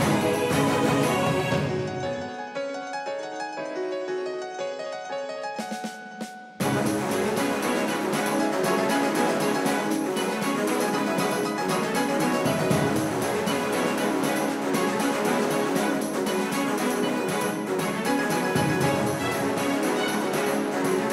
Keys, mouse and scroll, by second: 0.8 c, 7.0 z, 14.1-18.5 right drag, 17.4 a, 18.5 a, 18.9 a, 19.1 c.